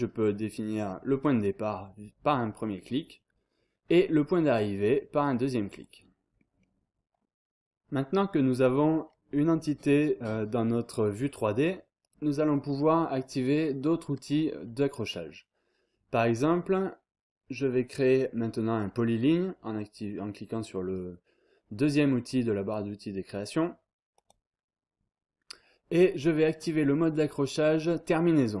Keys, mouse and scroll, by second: 1.1 click, 2.5 scroll down 2, 2.7-3.3 scroll up 2, 5.7 click, 6.4 scroll down 2, 6.6-7.2 scroll up 1, 11.6-12.1 scroll up 1, 16.4-16.9 scroll down 1, 24.1 click, 25.6-26.2 scroll up 1.